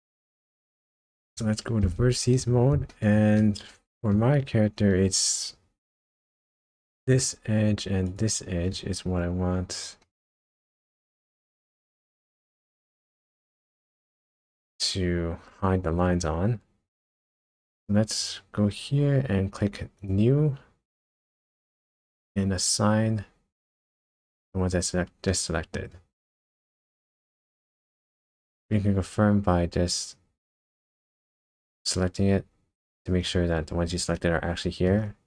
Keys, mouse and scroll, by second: 0.6 middle click, 1.2 scroll up 1, 2.6 1, 2.9 shift+middle click, 3.4 middle click, 4.4-4.8 scroll up 2, 6.8 alt+click, 8.1 alt+shift+click, 9.2-9.8 scroll down 3, 10.0 middle click, 11.3 scroll up 1, 12.6 alt+shift+click, 13.2 alt+shift+click, 14.2 middle click, 17.1 scroll up 2, 18.2 click, 20.0 click, 23.8 click, 24.9 scroll down 1, 25.3 middle click, 25.9 middle click, 26.9-27.4 scroll down 2, 28.2 click, 31.4 click, 33.3 middle click.